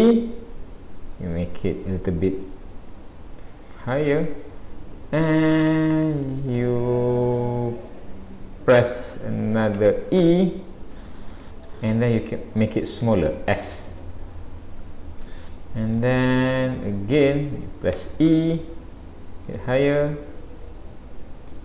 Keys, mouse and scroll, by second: 13.1 shift+middle click, 14.0 s, 21.5 click.